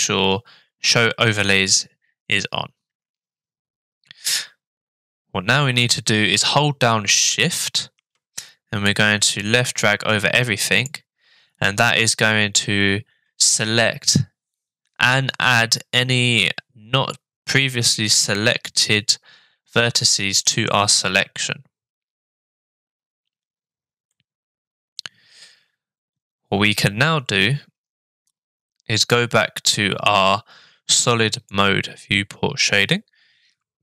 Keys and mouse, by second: 4.3-5.8 middle drag, 8.9-10.9 shift+drag, 24.1 middle click, 31.3 click.